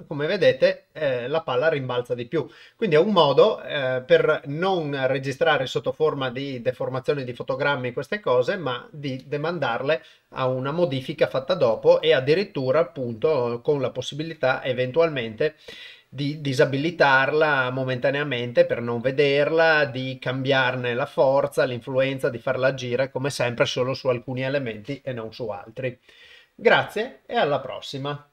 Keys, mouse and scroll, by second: 11.6 Tab, 17.7-28.3 drag.